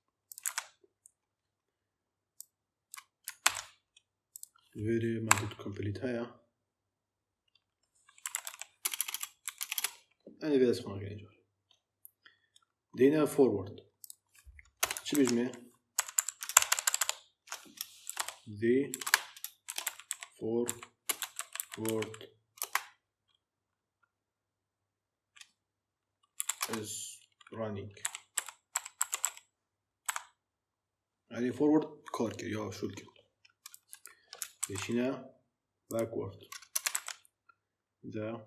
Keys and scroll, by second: 3.3 ctrl+c, 5.2 ., 7.9-9.5 typing, 14.7 Return, 15.0 ctrl+v, 15.8 Left, 16.4 ctrl+shift+Left, 17.7-22.5 typing, 26.0-26.8 typing, 27.9-29.9 typing, 34.8 ctrl+c, 36.6 Return, 36.8 ctrl+v.